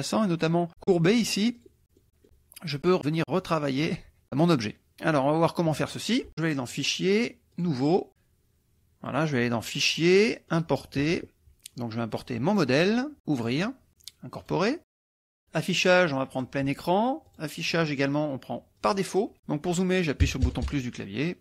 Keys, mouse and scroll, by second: 1.6 click, 2.0 middle click, 3.0-4.0 drag, 4.2 click, 4.9 middle click, 6.7 click, 7.7 click, 9.2 click, 10.6 click, 12.6 click, 13.4 click, 14.4 click, 15.2 click, 16.3 click, 17.3 click, 19.0 click, 20.2 KP_Add.